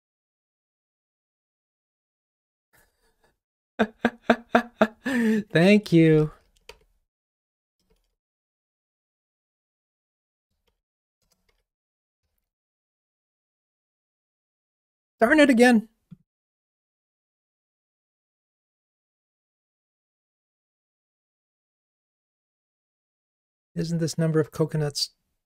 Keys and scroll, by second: 7.5 Return, 12.2 ctrl+r, 16.5 Right, 17.9 Down, 19.2 super+Down.